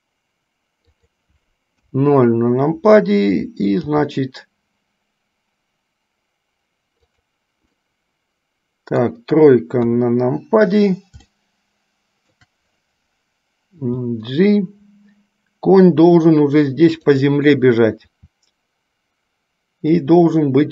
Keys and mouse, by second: 2.0 KP_0, 4.0 g, 7.8-9.3 middle drag, 10.0 KP_3, 11.6-12.6 shift+middle drag, 14.0 g, 18.2 s.